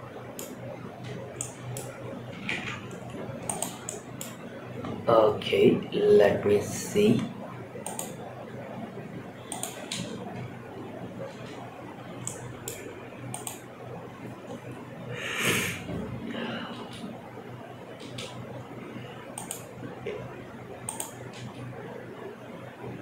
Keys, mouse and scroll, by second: 0.6 space, 0.7 middle click, 2.1 shift+Left, 2.2 scroll up 3, 2.8 click, 3.2-3.5 middle drag, 5.5 scroll down 2, 7.2 click, 9.1 click, 9.6 space, 11.1 space, 11.2-11.6 scroll down 3, 11.6 middle click, 12.8 click, 13.1 scroll down 2, 14.4 scroll down 2, 16.1 space, 17.7 space, 18.7-19.0 drag, 19.4-20.3 scroll up 2, 20.3 click, 20.7 space.